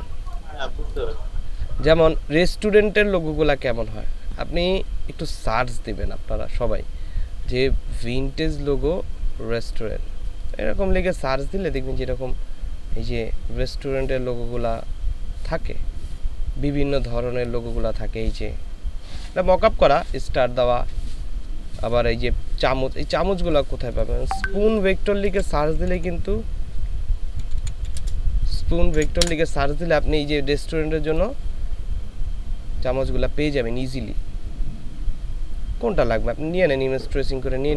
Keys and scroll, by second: 25.5-29.5 typing.